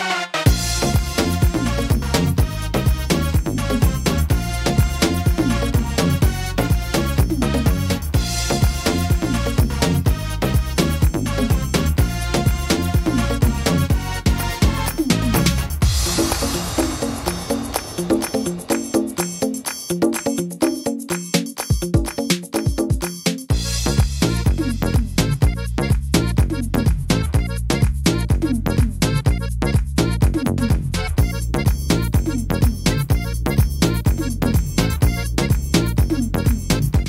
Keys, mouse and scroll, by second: 0.7 c, 5.3 click, 5.3 s, 7.8 middle click, 10.5 s, 11.9 middle click, 12.4-13.0 scroll down 2, 12.8 middle click, 13.3 shift+middle click, 13.8-14.1 scroll up 3, 14.7 right click, 15.2 middle click, 15.5-16.3 scroll down 3, 15.9 right click, 16.5 shift+right click, 16.9 shift+right click, 18.5 c, 20.3 shift+d, 30.5 click, 34.0 scroll up 1, 35.0 right click, 35.0-35.7 scroll up 3, 35.7 right click, 36.7 right click.